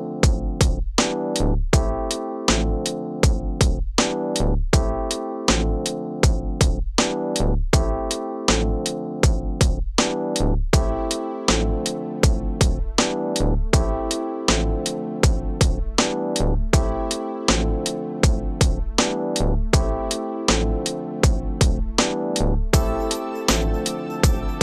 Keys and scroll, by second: 12.9 ctrl+KP_Subtract, 13.4 space, 17.4 space, 20.2 ctrl+alt+z.